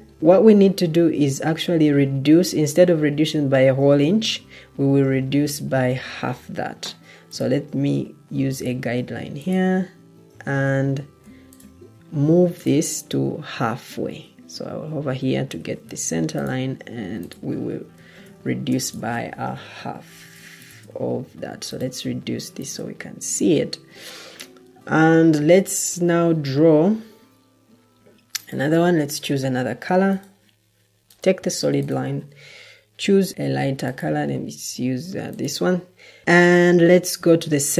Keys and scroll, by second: 15.4 ctrl+d, 18.1 Escape, 19.5 Delete, 23.8 Escape, 23.9 Escape, 35.4 Escape.